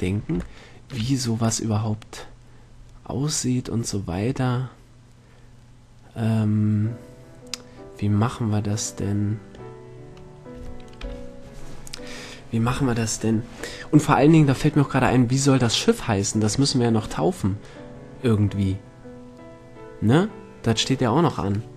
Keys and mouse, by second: 10.7 middle click, 11.5 KP_7.